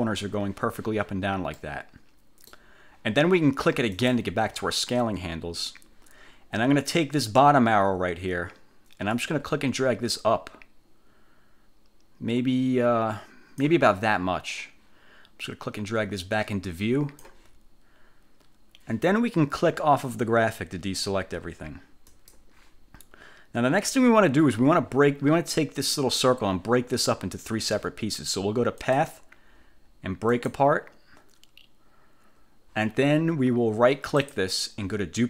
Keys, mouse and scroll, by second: 1.6-2.8 middle drag, 4.0 click, 9.2-14.0 drag, 15.6-17.6 drag, 22.2 click, 25.9 click, 29.0 click, 30.4 click, 34.3 click, 34.3 middle click.